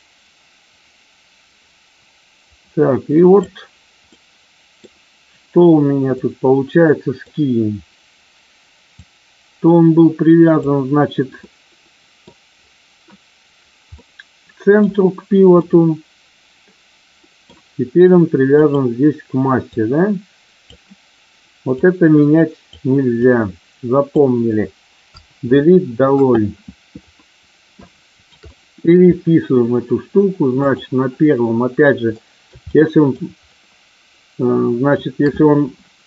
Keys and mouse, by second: 4.0-4.8 middle drag, 6.2-7.2 middle drag, 8.8-10.5 drag, 11.4-12.2 middle drag, 13.9-14.8 middle drag, 15.5-17.4 middle drag, 18.5 click, 19.7-20.7 drag, 21.8-22.8 drag, 23.2-24.2 drag, 25.0 Delete, 27.8-28.2 shift+middle drag, 28.3-28.9 middle drag, 30.5 click, 32.3-33.2 ctrl+middle drag, 33.5-34.9 ctrl+middle drag.